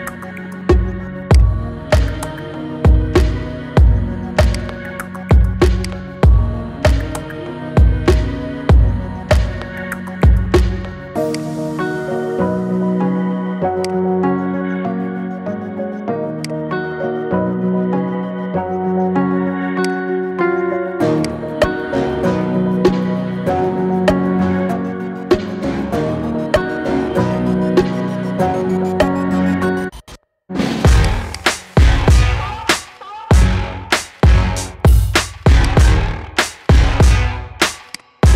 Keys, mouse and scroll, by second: 1.7-2.6 scroll down 5, 2.6 r, 5.1 s, 6.9 KP_1, 8.0 g, 11.5 scroll up 5, 12.3 s, 14.6 scroll up 6, 15.6 s, 16.9 g, 20.2 s, 21.4 scroll down 1, 21.5-22.1 middle drag, 22.1-22.4 scroll down 3, 22.4-23.0 middle drag, 23.0-23.4 scroll up 5, 23.4-27.0 shift+middle drag, 27.0 KP_1, 28.3 g, 31.1 click, 31.4-33.0 middle drag, 33.0-33.4 scroll down 3, 33.4-34.5 middle drag, 34.5-35.4 scroll up 3, 35.4 click, 36.2-37.8 middle drag, 37.8 click.